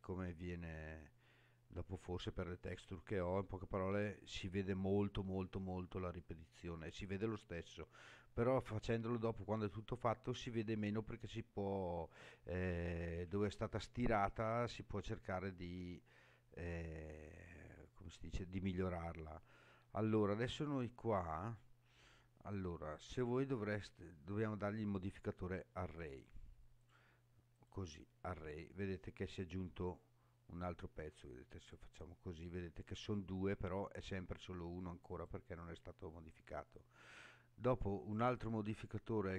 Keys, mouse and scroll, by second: 1.9-5.1 scroll down 2, 21.0-21.7 scroll down 3, 23.1-24.5 scroll up 1, 26.0 click, 26.8 click, 31.6 click, 35.1 click, 38.2-39.3 drag.